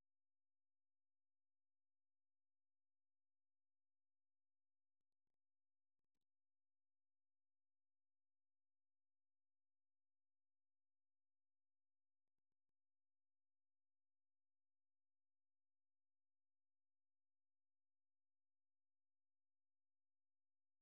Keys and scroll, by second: 5.2 ctrl+BackSpace, 6.0-8.1 typing, 18.0-19.1 typing.